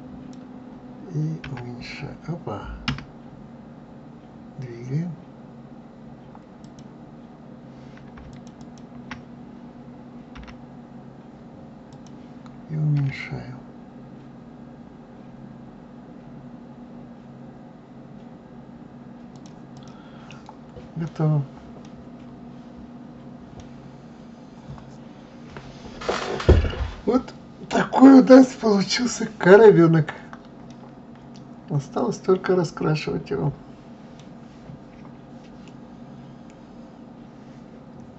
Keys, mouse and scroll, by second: 6.5 click, 8.3 shift+click, 8.6 shift+click, 10.3 g, 12.9 s, 19.7 click, 20.2 middle click, 21.1 scroll down 2, 21.8-23.6 middle drag, 23.6-26.7 scroll down 2, 29.9-30.6 scroll up 1, 30.6-33.7 middle drag.